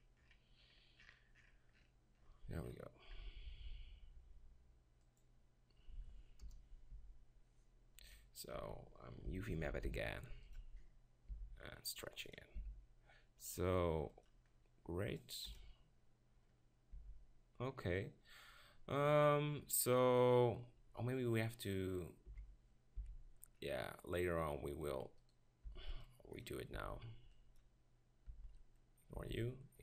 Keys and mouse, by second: 6.5 KP_0, 6.9 Tab, 8.1 KP_7, 8.6 Tab, 9.6 ctrl+l, 9.9 u, 11.3 s, 12.5 click, 12.7 g, 15.5 KP_0, 17.0 Tab, 22.3 KP_7, 23.0 z, 24.2-26.8 drag, 25.7 b, 26.8 b, 26.8 click, 28.3 b, 29.1 b.